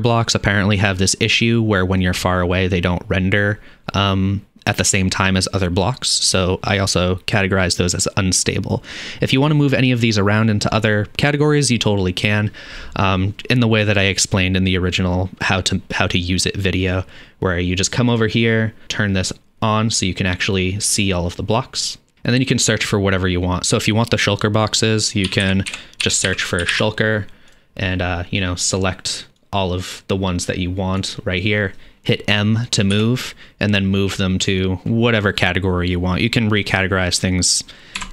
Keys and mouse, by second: 0.0-18.3 drag, 18.3-22.1 middle drag, 22.1-27.6 drag, 27.6-29.4 middle drag, 29.4-38.1 drag, 32.9 m.